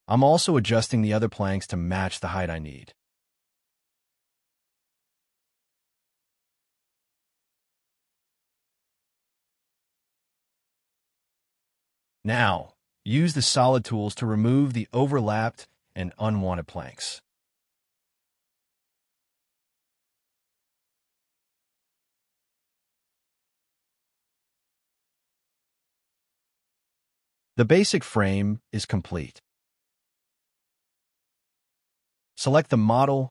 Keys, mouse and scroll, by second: 1.3 scroll up 2, 1.8 shift+click, 2.2 scroll up 1, 2.4 s, 3.9 space, 4.3 scroll down 1, 4.7 middle click, 5.9 scroll down 1, 6.3 middle click, 12.0 scroll up 1, 14.8 space, 15.2 double click, 16.4 Delete, 16.5 Escape, 17.1 shift+middle click, 18.8 middle click, 18.9 scroll up 1, 19.2 middle click, 20.5 space, 20.7 double click, 20.9 Delete, 21.0 middle click, 21.1 Escape, 21.4 middle click, 21.6 scroll up 1, 22.2 space, 22.3 scroll down 1, 22.4 middle click, 23.5-25.0 scroll up 3, 23.7 double click, 23.8 Delete, 24.0 double click, 25.1-25.7 scroll down 1, 25.8 space, 25.9 scroll down 1, 26.2 middle click, 29.2 scroll down 1, 29.5 middle click, 30.3 scroll down 1.